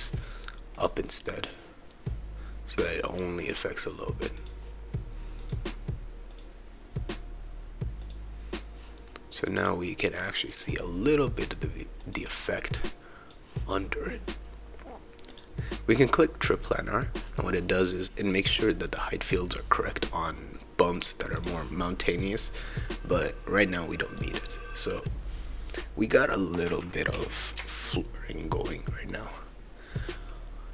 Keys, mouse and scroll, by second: 0.7 click, 1.9-3.0 right drag, 4.4 click, 5.4 click, 6.3 click, 8.0 click, 8.9-10.5 right drag, 12.0-13.3 drag, 15.3 click, 17.4-18.4 right drag, 21.4-22.9 drag, 22.9-24.2 right drag, 26.5-30.7 right drag, 27.1 s.